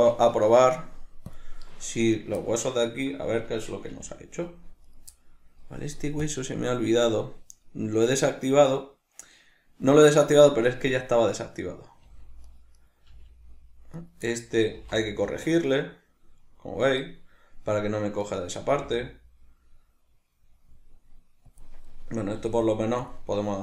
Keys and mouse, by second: 0.2 Escape, 1.3-2.0 drag, 2.0 right click, 2.4-6.2 ctrl+middle drag, 4.0 g, 6.2-10.8 drag, 10.8 right click, 12.8 right click, 14.3-18.2 middle drag, 14.8 g, 18.2 right click, 22.0-23.6 middle drag, 22.4 g.